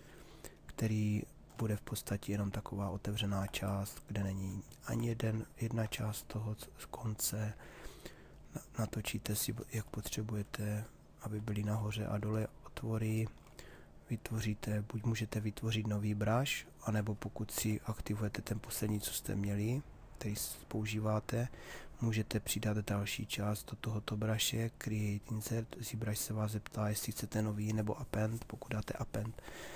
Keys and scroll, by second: 17.2 b.